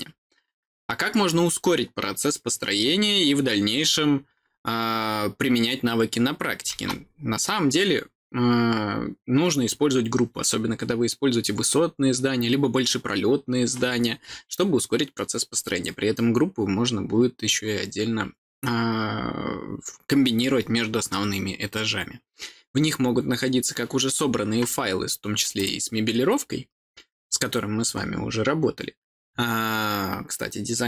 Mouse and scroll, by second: 25.3 click, 25.5 click.